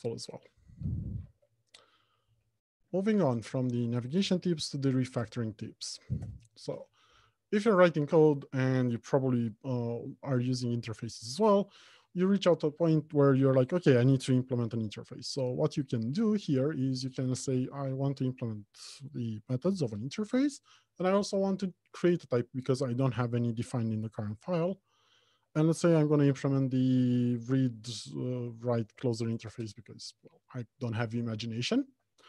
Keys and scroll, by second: 1.6 alt+Home, 2.2 Left, 2.9 Right, 3.2 Left, 3.6 Return, 17.0 alt+Insert, 19.3 ctrl+i.